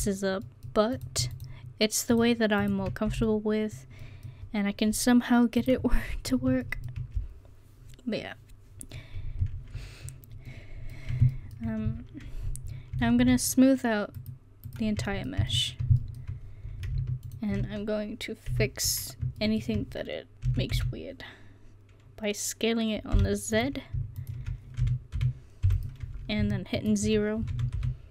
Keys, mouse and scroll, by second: 0.0 f, 3.1 f, 5.6 click, 11.2-12.5 middle drag, 13.2 a, 14.2 click, 15.2-16.4 drag, 18.6 KP_1, 19.3 middle click, 20.5 s, 21.8 middle click, 24.2-26.8 drag, 24.9 s, 27.5 s.